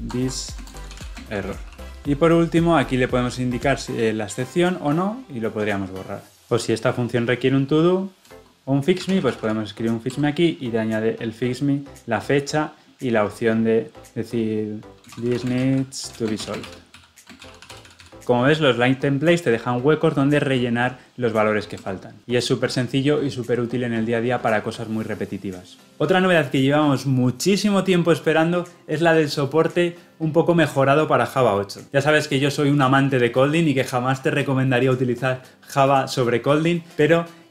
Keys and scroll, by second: 1.9 ctrl+p, 10.1 Return.